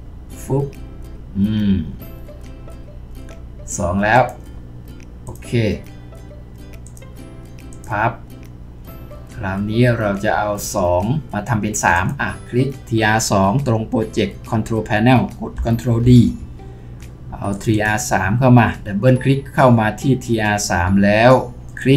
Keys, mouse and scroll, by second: 16.0 ctrl+d, 17.7 double click.